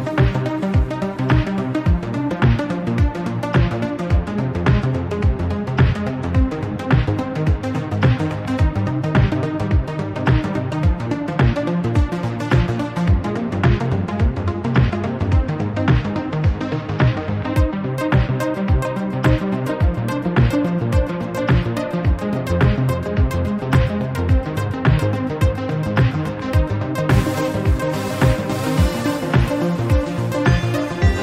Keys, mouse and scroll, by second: 1.1 scroll down 2, 1.3 middle click, 2.6 a, 3.1 1, 3.8-5.2 drag, 5.2-6.2 scroll up 2, 5.5 middle click, 6.2 middle click, 6.8 click, 8.2 Tab, 8.5 scroll down 1, 8.6-10.8 middle drag, 10.8 scroll down 1, 11.0-11.6 middle drag, 11.6-12.2 scroll up 1, 12.2 Tab, 12.4 click, 13.7 Tab, 13.9-14.7 scroll down 3, 14.7 KP_1, 15.1 Tab, 15.3-15.7 scroll up 3, 15.8 shift+middle click, 16.7 2, 17.0 alt+click, 18.5 alt+shift+click, 18.7 alt+shift+click, 20.8 alt+click, 21.1 alt+click, 21.7 alt+click, 22.1 alt+shift+click, 22.6 p, 24.0 Tab, 24.5 Tab, 25.6 alt+click, 26.4 alt+shift+click, 27.7 alt+click, 28.6 p, 29.4 Tab, 29.8 click, 30.4 Delete, 30.8 click.